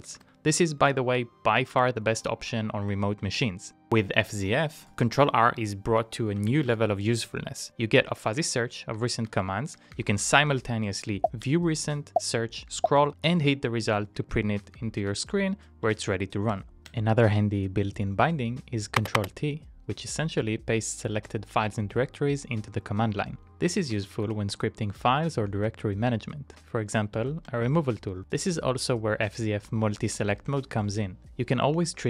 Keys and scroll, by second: 3.4 ctrl+r, 5.1 Up, 6.2-7.4 typing, 8.4 Up, 9.0 Up, 9.2 Up, 9.5 Up, 9.8 Up, 9.9 Up, 11.6 ctrl+c, 11.8 ctrl+r, 13.2-14.1 typing, 14.4 Up, 14.8 Up, 15.0 Up, 15.2 Up, 15.9-16.7 typing, 17.1 ctrl+t, 23.5 Down, 23.9 Down, 24.1 Down, 24.3 Down, 24.5 Down, 24.6 Down, 27.2-27.9 typing, 30.6 ctrl+t, 31.8 Down.